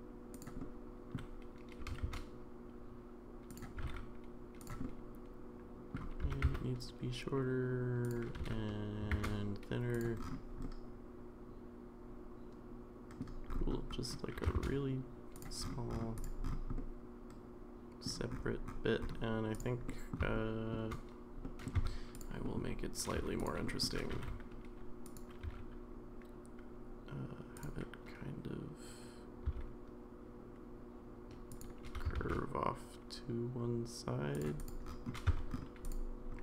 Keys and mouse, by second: 0.6-1.1 middle drag, 1.8 g, 3.8 g, 4.8-5.9 middle drag, 6.2 s, 8.4 s, 10.6-13.2 middle drag, 14.4 g, 16.2 click, 16.7-18.0 middle drag, 19.9 middle drag, 20.3-20.7 shift+middle drag, 21.4 middle drag, 21.8 Tab, 22.2 click, 22.4 middle click, 23.2 3, 23.6 middle click, 24.1 g, 25.4 e, 29.4 s, 31.8 g, 35.3 Tab, 35.9 click.